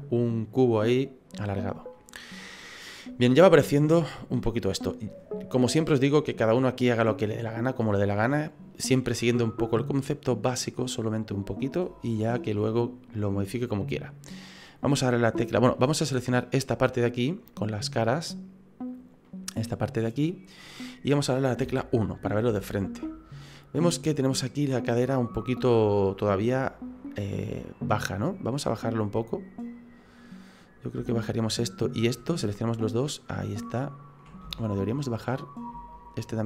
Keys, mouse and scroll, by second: 1.6-1.9 scroll down 1, 1.9 middle click, 4.2 middle click, 12.1 shift+middle click, 12.7 middle click, 16.4 right click, 17.9 click, 18.9 right click, 19.2 middle click, 21.6 KP_1, 22.5 shift+middle click, 27.8-28.2 scroll up 5, 28.2 middle click, 29.0 right click, 30.6 middle click, 31.1 shift+middle click, 31.8 shift+right click, 32.8 click, 34.4 ctrl+z, 34.9 middle click, 35.9 shift+right click, 36.3 middle click.